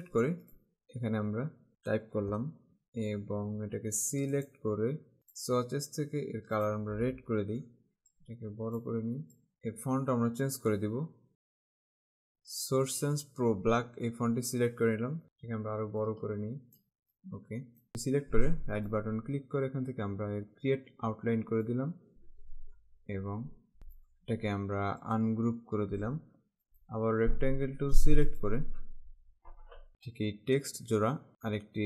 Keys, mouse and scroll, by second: 0.0 click, 4.4 click, 5.4 click, 6.8 click, 8.3 alt+shift+Caps_Lock, 9.4 click, 11.6 click, 16.1 alt+shift+Caps_Lock, 17.1 click, 19.0 right click, 21.4 click, 23.9 right click, 25.1 click, 26.7 right click, 28.4 click, 29.9 click.